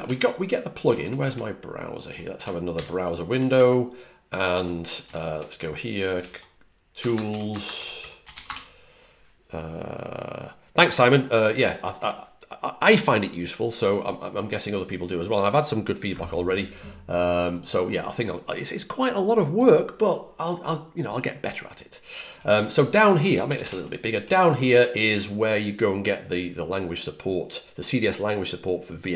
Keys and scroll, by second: 0.8 super+Tab, 0.9 super+Tab, 2.6 super+n, 3.4 ctrl+alt+super+Left, 4.4 alt+super+Right, 4.9 alt+super+Right, 6.6-8.7 typing, 23.3 super+=, 23.5 super+=.